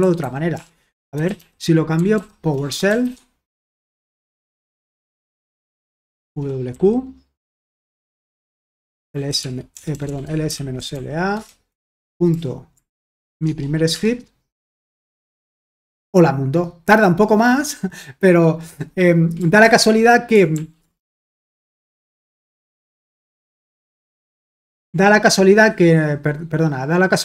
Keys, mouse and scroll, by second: 0.0-6.2 typing, 7.3-15.5 typing, 13.4 Tab, 19.6 ctrl+p, 20.5 ctrl+p, 21.2 Return, 24.2 ctrl+c, 24.6 ctrl+l.